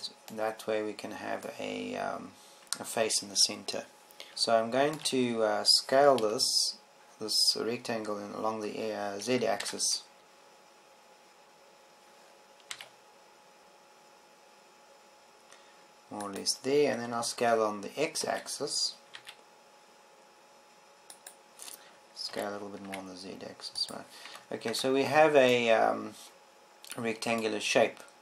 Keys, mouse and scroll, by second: 11.1 s, 18.1-19.8 drag, 19.8 s, 23.1 click, 24.2 s, 25.7 click, 25.8 Tab, 26.4 Tab.